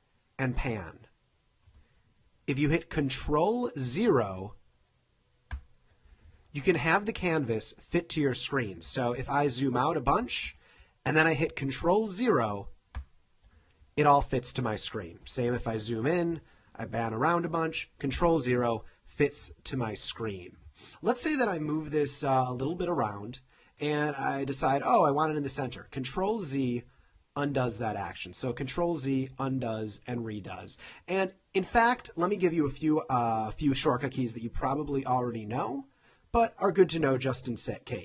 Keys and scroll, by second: 5.5 super+0, 8.9 super+-, 13.0 super+0, 15.2 super+=, 15.8 super+=, 16.4 space, 18.2 super+0, 27.0 super+z, 27.8 super+z, 28.7 super+z, 29.3 super+z.